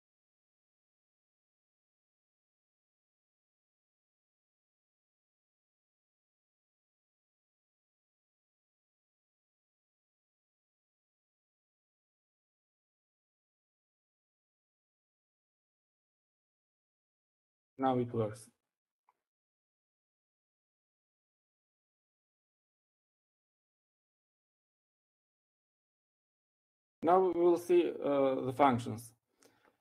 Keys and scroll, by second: 0.0-2.4 typing, 13.1-15.7 typing, 16.2 Up, 17.5-18.2 typing.